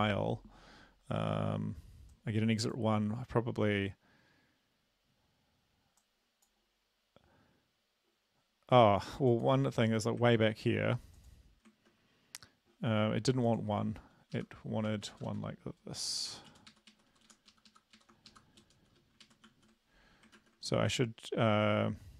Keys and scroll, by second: 10.3 ctrl+`, 11.8 ctrl+`, 14.4 Left, 15.0 shift+Right, 16.0 shift+', 16.4 Right, 16.6 Down, 16.7 Right, 16.7 ", 17.0 Right, 17.2 Right, 17.3 Down, 17.6 Left, 17.7 Left, 18.0 Right, 18.3 shift+Left, 18.8 ", 19.3 ctrl+Right, 19.5 ctrl+s, 20.4 ctrl+`.